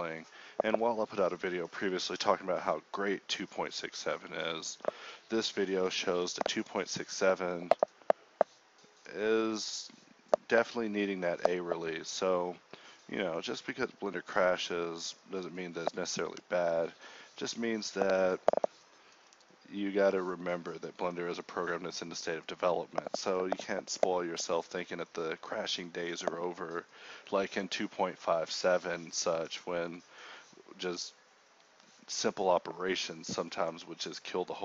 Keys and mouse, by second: 0.0-4.9 typing, 2.9 Escape, 3.1 ctrl+z, 3.8 Tab, 4.3 Tab, 5.8 Tab, 6.0 KP_1, 6.1 Tab, 6.9 alt+s, 8.0 ctrl+b, 8.8 alt+s, 9.4 g, 10.2 Tab, 13.3 KP_1, 13.5 Tab, 14.1 z, 15.2-18.0 typing, 16.6 ctrl+r, 19.6 ctrl+r, 20.6 click, 21.1 alt+s, 21.8 g, 22.8 middle click, 23.0 click, 24.0 a, 24.0 k, 26.1-28.8 typing, 29.8 ctrl+z, 30.1 k, 32.7 middle click, 33.0 g, 33.8 ctrl+b.